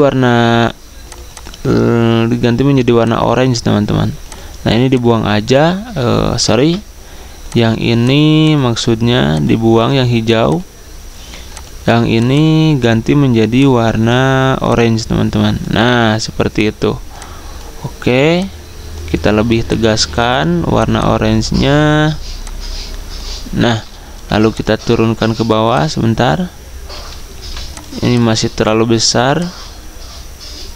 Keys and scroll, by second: 6.6 ctrl+z, 24.1 v.